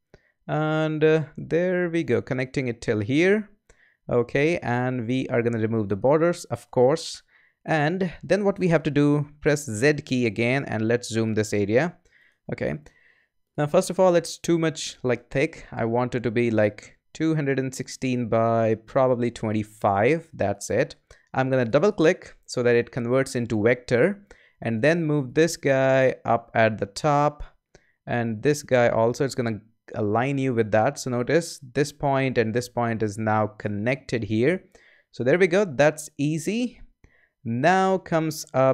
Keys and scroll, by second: 9.7 z.